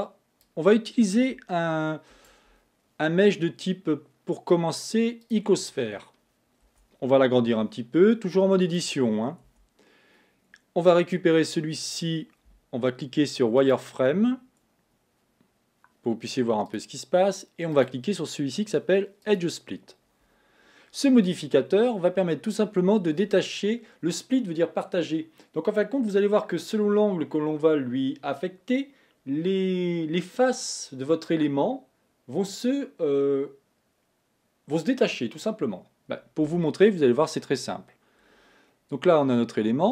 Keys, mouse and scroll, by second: 1.6 click, 2.2 shift+a, 6.7 Tab, 7.8 s, 11.9 click, 13.7 click, 16.7 click, 17.8-20.8 drag, 38.8-39.9 scroll up 1.